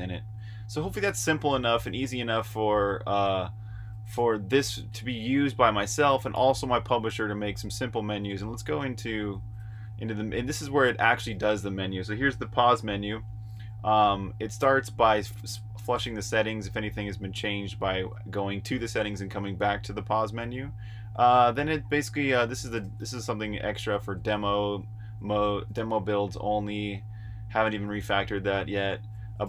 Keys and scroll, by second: 1.3-2.1 typing, 4.1 super+j, 7.5 super+j, 8.0 super+j, 9.5 super+k, 10.2-14.5 typing, 19.7-23.6 typing, 26.0-29.4 typing.